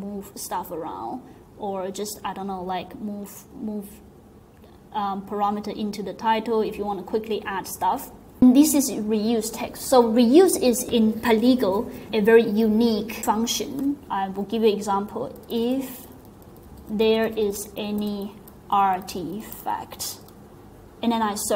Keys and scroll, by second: 15.1-20.7 typing.